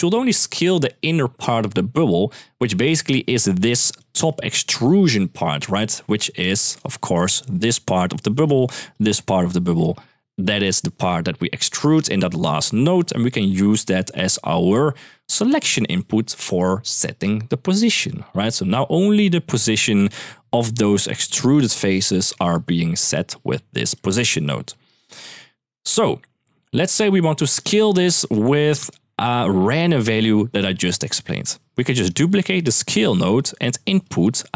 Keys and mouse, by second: 3.8-6.5 drag, 6.3 Escape, 7.1-9.6 d, 8.7 click, 13.2 click, 14.8-18.1 drag, 22.2 shift+middle click, 22.7 shift+middle click, 23.7-24.2 drag, 24.7-25.0 shift+middle drag, 27.0 click, 27.6 drag, 28.0 g, 28.9 middle click, 29.2 click, 31.7 click, 32.1 shift+d, 33.1 middle click, 33.8 drag.